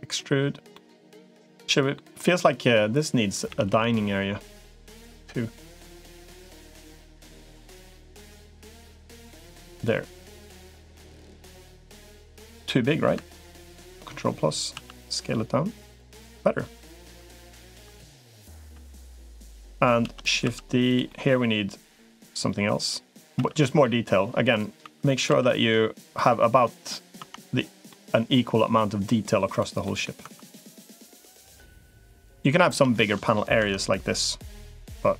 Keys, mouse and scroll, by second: 0.5-1.8 middle drag, 3.4 a, 3.6 g, 9.2 g, 11.9 middle click, 13.4 ctrl+KP_Add, 14.6 s, 16.4 s, 17.0 s, 17.8 shift+middle click, 19.8 shift+d, 20.2 s, 20.9 middle click, 21.9 middle click, 22.8 click, 23.2 e, 24.6 e, 25.2 s, 26.5 middle click, 27.0 Tab, 27.7-28.9 middle drag, 29.7 middle click, 30.4 middle click, 31.0 Tab, 31.2-32.2 middle drag, 32.7 middle click, 33.4 Tab, 35.0 Tab.